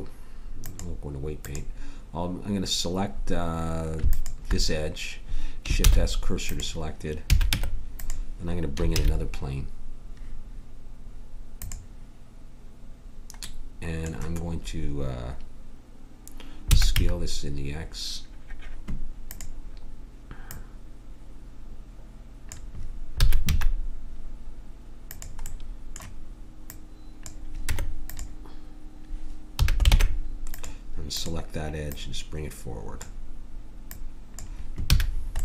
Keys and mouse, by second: 4.1-5.8 drag, 5.8 shift+s, 7.3 a, 7.5 Tab, 8.9 shift+a, 16.7 s, 20.5 click, 23.2 s, 27.7 Tab, 29.5 a, 29.9 ctrl+Tab, 31.1-34.0 drag, 34.9 a.